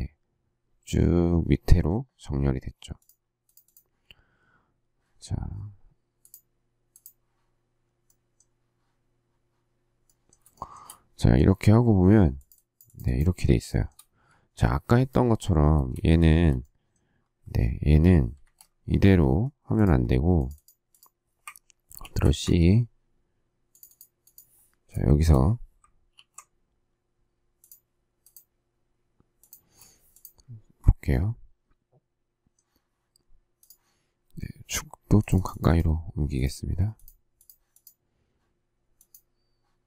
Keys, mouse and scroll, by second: 10.5 shift+middle click, 13.7 shift+middle click, 16.2 shift+scroll, 16.3 shift+z, 18.3 space, 18.4 Escape, 22.0 ctrl+c, 22.4 Escape, 26.2 ctrl+v, 29.6 space.